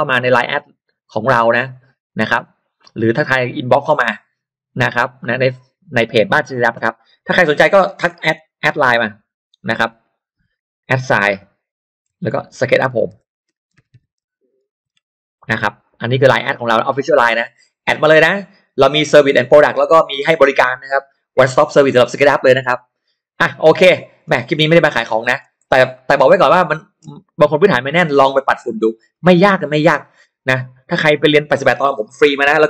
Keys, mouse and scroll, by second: 3.1 click, 6.0 click, 8.2 shift+x, 9.9 t, 11.2-15.8 typing, 16.1 click, 16.7-19.8 drag, 20.4 shift+click, 22.6 shift+right click, 24.1-24.8 scroll up 1, 24.8-25.1 scroll down 1, 25.1 middle click, 25.6 scroll down 2, 25.9 middle click, 26.3-26.7 scroll down 1, 26.7 middle click, 27.1-27.7 scroll up 1, 28.7 middle click, 29.3 scroll up 2.